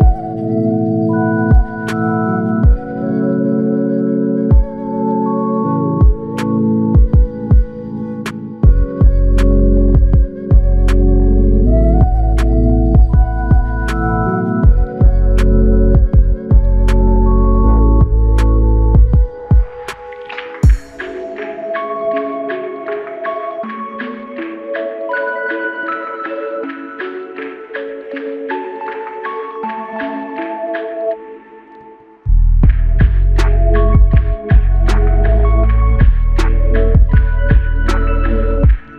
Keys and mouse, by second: 11.5 alt+click, 14.6 double click, 16.2-17.0 typing, 34.7 alt+click, 36.8 space.